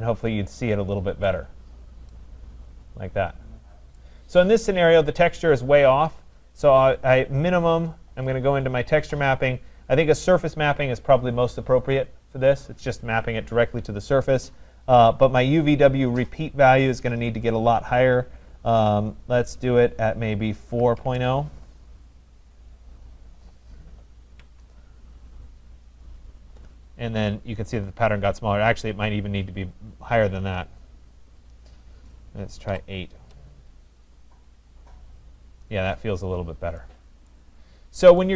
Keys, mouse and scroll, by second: 1.3 right click, 1.6 middle click, 4.1 right click, 4.5 click, 4.6-5.0 scroll, 5.2 middle click, 6.5 scroll, 8.3 click, 10.8 click, 16.3 click, 20.5-21.6 typing, 24.4 Tab, 26.0 click, 27.0-27.9 scroll, 28.4-29.0 scroll, 29.1 click, 31.5 click, 32.7 8, 33.2 Return, 34.2 click, 35.2-35.8 scroll, 35.9-36.6 scroll, 36.6 KP_8, 37.4 right click, 37.8-38.1 scroll.